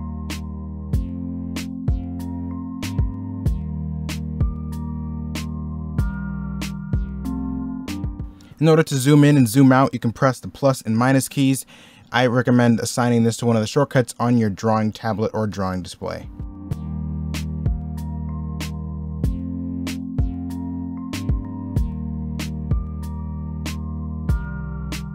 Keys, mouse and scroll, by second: 0.0-1.8 typing, 2.5 ctrl+z, 2.9 ctrl+z, 3.1 x, 3.2 ctrl+z, 3.5 s, 3.8 e, 4.4 ctrl+z, 5.1 ctrl+z, 5.4 ctrl+z, 5.6-7.1 typing, 7.4 ctrl+z, 7.9 scroll up 1, 8.0 middle click, 17.2 e, 17.6 b, 17.8 middle click, 17.9 e, 18.0 z, 19.0 ctrl+z, 19.8-21.4 typing, 22.1 ctrl+z, 22.6 middle click, 22.7 z, 23.3 z.